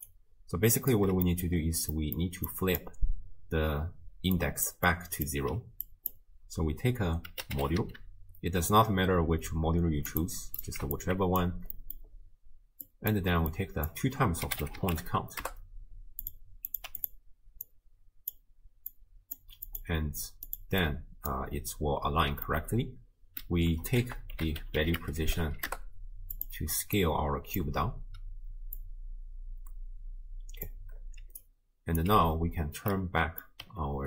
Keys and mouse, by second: 0.0-1.2 typing, 0.1 click, 1.3 middle click, 1.9 middle click, 2.6 click, 4.1 d, 4.4 click, 4.7 d, 4.8-5.5 d, 5.9-10.6 drag, 11.0-11.4 alt+drag, 11.8 middle click, 12.9 click, 13.5-16.4 drag, 16.7 click, 17.7-18.4 drag, 19.7 click, 20.5 click, 20.9-21.3 drag, 22.5 middle click, 24.1 ctrl+a, 28.8-30.7 drag, 31.2 d, 31.4 click, 32.0 d, 33.0 middle click.